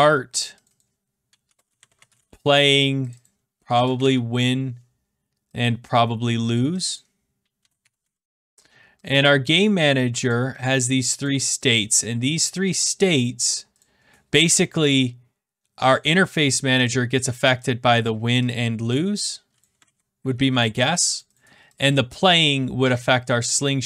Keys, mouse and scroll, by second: 0.0-0.1 typing, 0.6 click, 0.8 click, 1.2-4.7 typing, 3.1 click, 3.2 click, 6.5 click, 6.8 click, 7.3-8.5 typing, 9.0 click, 9.7 click, 13.5 click, 13.7 click, 15.9 click, 16.5 click, 18.0 click, 18.5 click, 19.6 click, 20.7 ctrl+z, 21.1 click, 21.3 click, 23.4 click.